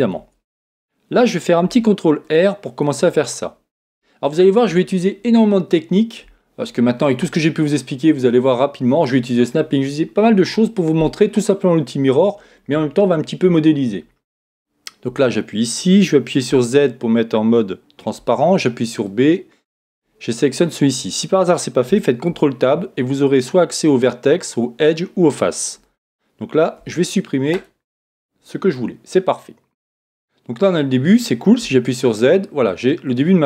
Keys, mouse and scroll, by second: 0.1 Tab, 1.6 ctrl+r, 2.8 click, 4.6-15.0 middle drag, 15.0 a, 16.5 z, 18.2 b, 22.3 ctrl+Tab, 25.8 Escape, 26.8 x, 28.5-31.2 middle drag, 31.6 z, 32.0-33.4 middle drag.